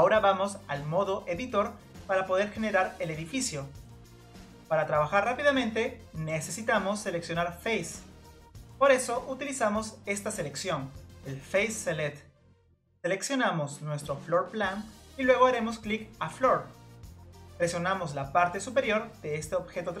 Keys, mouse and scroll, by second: 0.2-8.3 drag, 11.0 click, 14.1 click, 16.4 click, 16.9-18.0 scroll down 2, 18.0-18.7 scroll down 1, 18.7-19.4 scroll down 1, 19.4-20.0 scroll down 1.